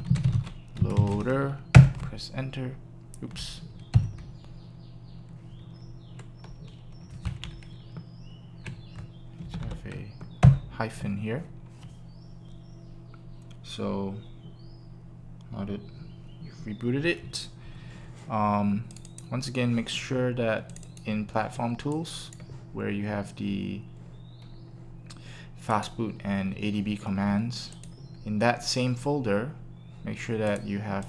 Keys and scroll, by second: 0.5-1.3 typing, 1.8 Return, 7.4 Left, 7.9 Left, 9.4 Left, 10.4 Return.